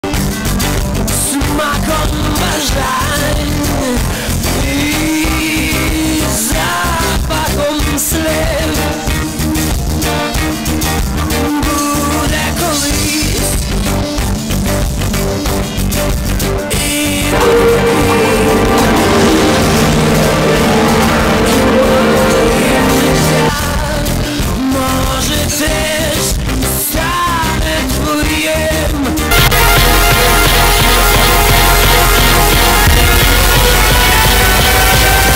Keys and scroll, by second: 0.1 ctrl+q, 2.1 b, 2.5 Down, 3.7-4.5 Down, 4.9 Down, 5.3 Return, 23.5 Page_Down.